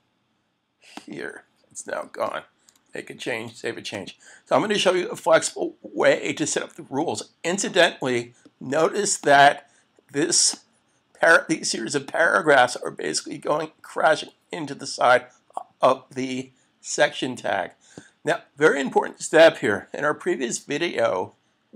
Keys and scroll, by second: 3.3 super+s.